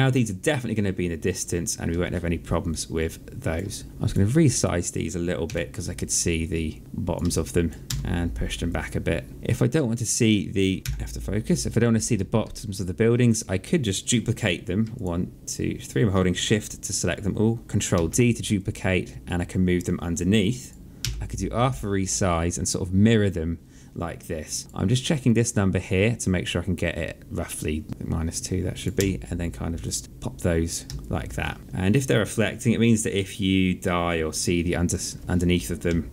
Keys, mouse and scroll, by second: 2.5 alt+click, 3.8 shift+click, 5.2 r, 6.2 click, 7.1 alt+click, 7.6 w, 8.4 click, 9.3 alt+middle click, 10.8 f, 12.2 alt+middle click, 13.0 click, 14.7 shift+click, 17.7 ctrl+d, 18.3 click, 20.8 r, 22.1 click, 27.1 click, 28.7 w, 29.6 click, 30.8 alt+click, 32.6 click, 35.6 Left.